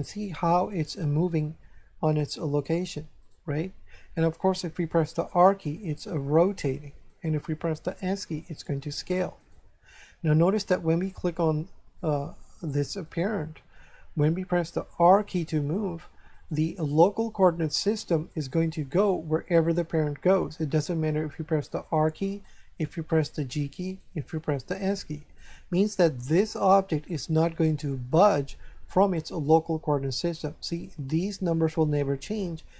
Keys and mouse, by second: 3.2 right click, 5.0 r, 7.1 right click, 8.0 s, 9.3 right click, 13.0 right click, 14.8 r, 16.3 right click, 21.3 r, 22.3 right click, 22.9 g, 23.9 right click, 24.5 s, 25.3 right click.